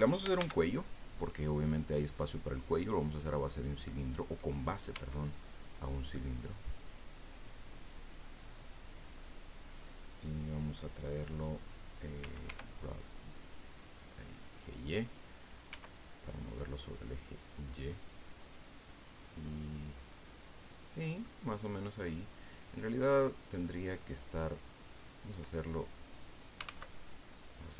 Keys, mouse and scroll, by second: 0.4 shift+a, 3.5 click, 4.9 s, 7.2 click, 7.9-9.3 drag, 12.2 g, 12.4 y, 14.9 click, 15.7 s, 17.6 click, 18.2-19.3 drag, 19.5-21.4 middle drag, 26.3-27.2 typing.